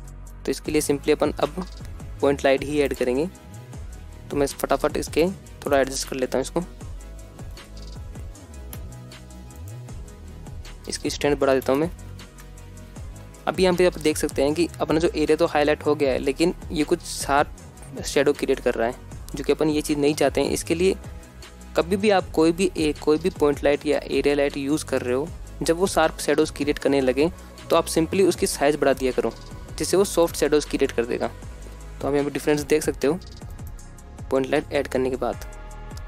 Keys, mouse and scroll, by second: 0.5 shift+a, 3.3-5.5 typing, 4.0 click, 4.3 scroll up 2, 4.4 shift+middle drag, 5.0 click, 6.5 click, 6.6 scroll down 1, 6.7 middle click, 6.8 click, 7.1 g, 7.4 click, 7.6 KP_0, 7.9 scroll up 1, 8.1 middle click, 8.2 scroll down 2, 8.3 middle click, 8.4 scroll up 2, 8.6 KP_7, 9.6 click, 10.6-12.8 drag, 11.3 KP_0, 12.8 KP_0, 13.0 g, 13.2 z, 13.4 click, 27.7-29.5 drag, 34.5-35.5 scroll up 2, 35.5 click.